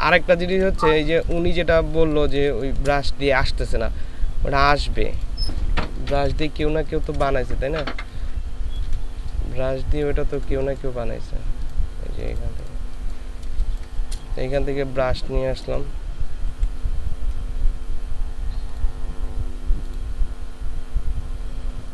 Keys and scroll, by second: 0.2 ctrl+space, 1.9 ctrl+space, 5.8 ctrl+space, 6.8 ctrl+space, 13.5 ctrl+space, 16.5 F5.